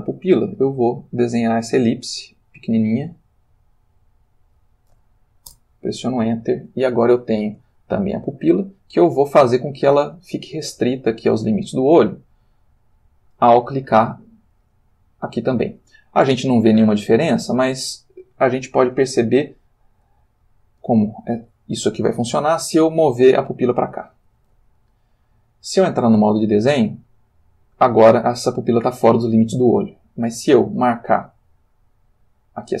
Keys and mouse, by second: 0.2 ctrl+middle click, 1.5-4.7 drag, 5.5 Return, 7.0 ctrl+middle click, 14.5 click, 17.6 click, 18.9 click, 19.7 click, 20.8-21.5 drag, 23.0 g, 24.1 click, 25.3 Tab, 31.7 click.